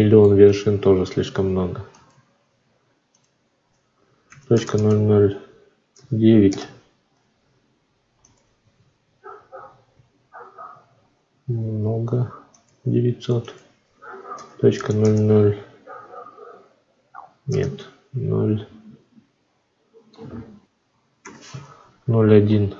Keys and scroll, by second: 0.3 ctrl+z, 6.3 Return, 11.4 ctrl+z, 17.3 BackSpace, 20.8 F9, 21.1 1.